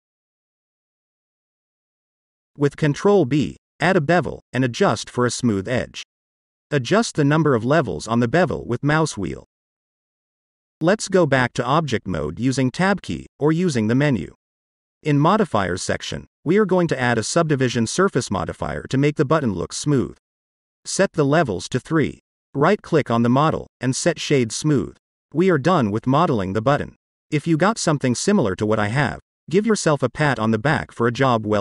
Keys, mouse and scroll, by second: 2.1 ctrl+b, 6.2 click, 6.8 click, 7.5-10.5 middle drag, 11.9 click, 12.9-13.3 scroll down 1, 13.3-15.7 middle drag, 16.5-18.6 drag, 20.3 click, 20.5 click, 21.5 click, 22.3-24.2 middle drag, 24.6 click, 24.9 right click, 26.0-26.9 middle drag, 27.3-27.6 scroll up 1, 27.7-31.6 middle drag.